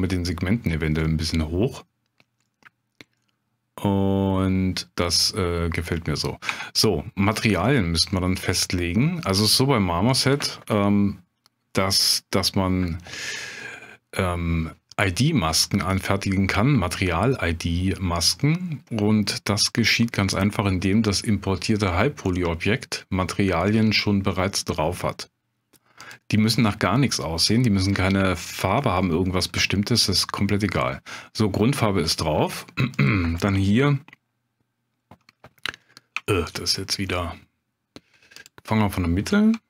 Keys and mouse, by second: 1.0-1.9 middle drag, 2.5 middle drag, 3.2-5.0 middle drag, 6.5 Tab, 9.4 Tab, 28.3-28.7 shift+drag, 28.9 middle click, 32.4 Tab, 32.9 click, 36.2 shift+click, 36.7 click, 37.2 click.